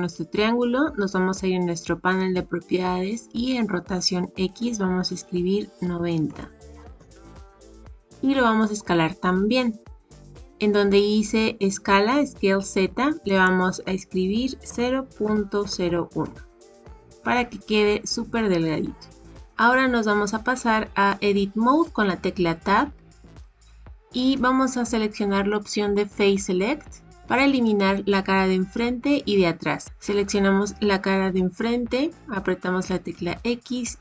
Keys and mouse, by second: 5.0-9.3 drag, 13.3-16.9 drag, 22.9 Tab, 33.1 x.